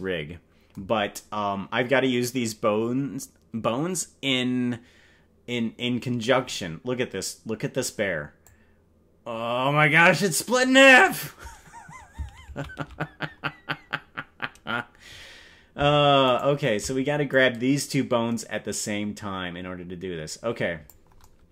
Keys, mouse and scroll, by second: 8.4-11.0 drag, 12.9 ctrl+z, 16.3 shift+right click, 17.3-20.9 drag.